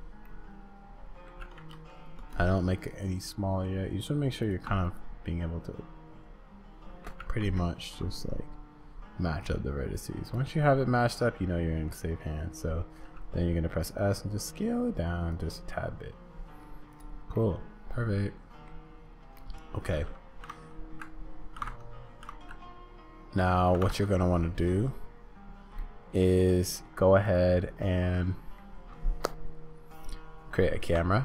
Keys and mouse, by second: 0.3-1.4 drag, 1.4 g, 4.9-7.2 drag, 7.2 g, 10.6-11.8 middle drag, 13.0 s, 15.8 click, 16.1 middle click, 17.3 click, 17.5-18.7 middle drag, 19.3 middle click, 25.8 click, 25.8 middle click, 27.3 click, 28.1 middle click.